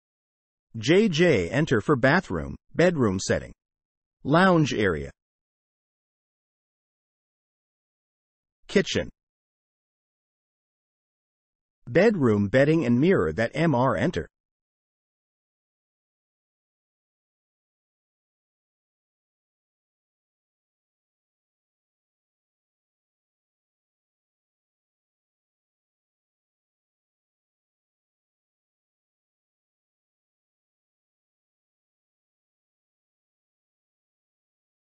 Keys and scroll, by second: 0.1 Escape, 1.1 j, 1.5 space, 5.1 Escape, 5.6 Delete, 6.1 j, 6.2 space, 8.7 Escape, 9.2 r, 9.3 space, 11.8 j, 11.9 space, 15.9 Escape, 16.2 Delete, 16.4 space, 22.3 Escape, 23.9 r, 24.0 space, 25.9 Escape, 26.2-27.6 typing, 29.4 m, 29.5 space, 30.9 m, 32.0 m, 32.9 m, 34.7-34.9 typing.